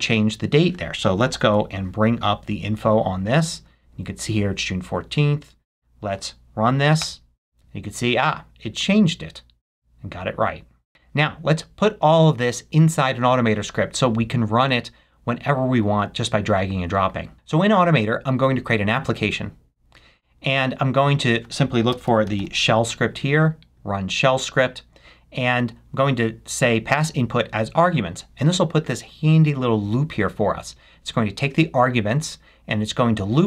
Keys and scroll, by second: 21.8 s.